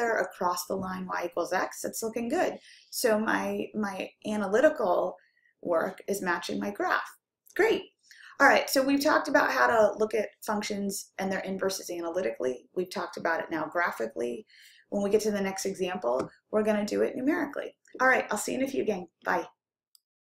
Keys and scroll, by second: 19.3 Down.